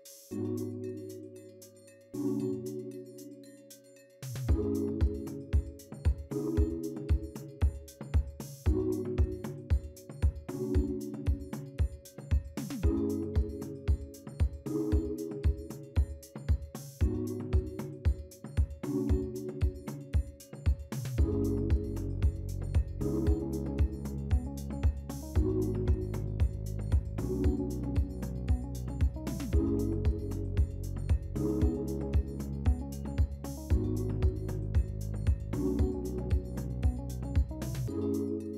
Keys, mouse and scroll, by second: 0.0 F2, 1.0-1.8 typing, 2.3 Return, 3.6 a, 22.3 double click, 27.2 typing, 30.2 1, 33.7 double click, 33.8 double click, 34.3-35.6 typing.